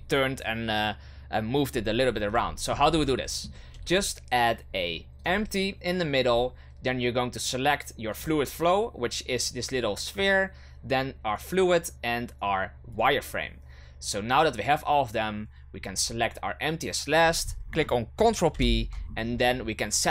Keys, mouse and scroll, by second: 2.1-2.4 scroll up 1, 2.4-2.8 shift+middle drag, 2.8 scroll up 1, 3.1-3.7 shift+middle drag, 3.7 shift+a, 8.1 click, 11.3 shift+right click, 12.9 shift+right click, 15.9 shift+right click, 18.5 ctrl+p.